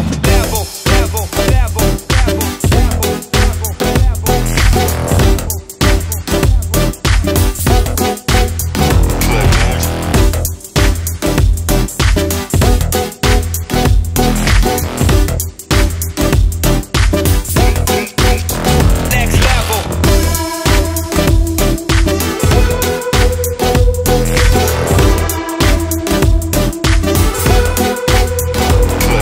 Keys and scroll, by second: 11.5-12.2 typing.